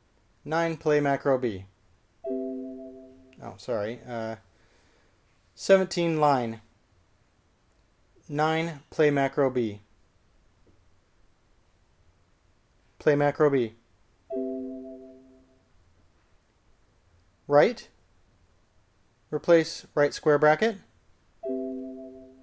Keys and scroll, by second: 0.6 n, 2.4 typing, 7.2-7.9 typing, 10.4-11.1 typing, 14.2-14.9 typing, 18.6 l, 21.5 typing.